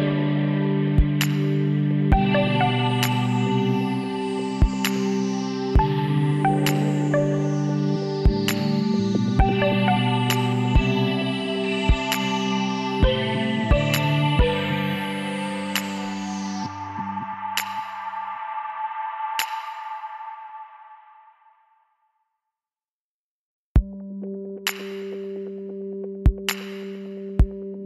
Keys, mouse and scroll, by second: 2.8-4.7 middle drag, 6.4-13.8 middle drag, 13.8 KP_1, 15.3 middle click, 17.7 Tab, 21.7 a, 25.3 ctrl+r.